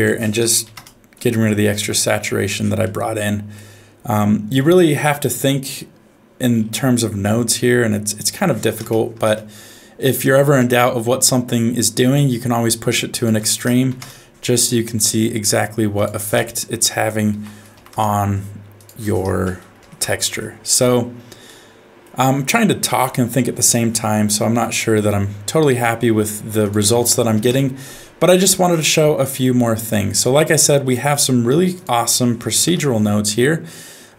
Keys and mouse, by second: 2.9 middle click, 4.8 middle click, 8.3 click, 10.6-12.0 middle drag, 13.2 click, 15.9-17.9 drag, 18.8-20.0 drag, 21.5 middle click, 24.5 middle click, 25.8 middle click, 26.6 click, 29.0 middle click, 29.9 click, 30.6 click, 31.2 middle click, 31.7 click, 32.1 middle click, 32.6 n.